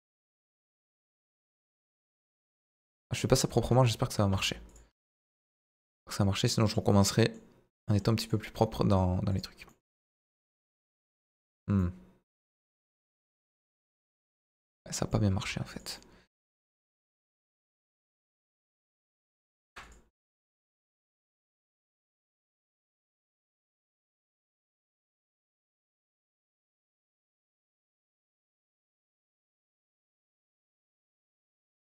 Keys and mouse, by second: 0.6 click, 0.7 z, 2.1 g, 3.6 Tab, 4.3 s, 4.7-7.4 drag, 9.3-14.0 drag, 14.0 Tab, 15.4 Tab, 17.7 KP_7, 18.2 Tab, 18.7 middle click, 19.7 ctrl+r, 24.3 e, 25.2 click, 25.4-27.3 middle drag.